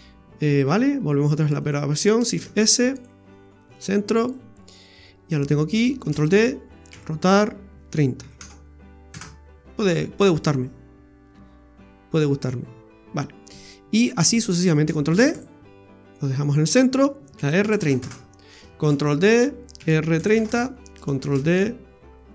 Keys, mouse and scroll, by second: 0.7-1.6 scroll down 2, 1.6 right click, 1.6 scroll down 1, 2.3 shift+s, 4.2 right click, 6.0 shift+d, 6.9 r, 13.5 scroll down 3, 14.1-14.8 scroll up 1, 15.1 shift+d, 17.3 r, 18.8 shift+d, 19.8 r, 21.3 shift+d.